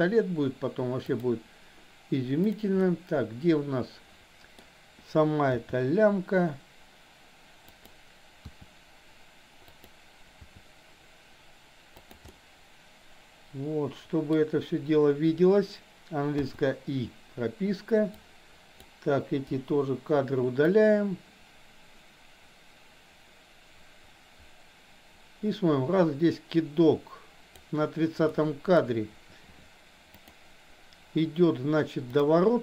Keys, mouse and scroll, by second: 1.2 click, 2.7-4.6 middle drag, 5.6 g, 8.4 r, 10.4 r, 12.3-14.3 middle drag, 16.4 i, 18.2-18.8 drag, 19.4 Delete, 20.7-27.7 drag, 28.2-28.8 middle drag, 30.2 click.